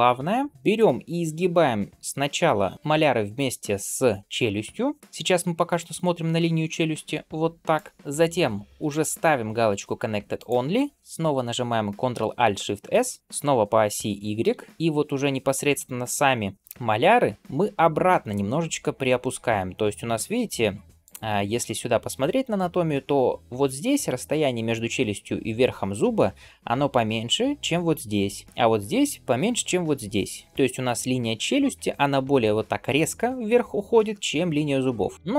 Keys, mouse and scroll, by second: 8.7-10.8 drag, 12.7 ctrl+alt+shift+s.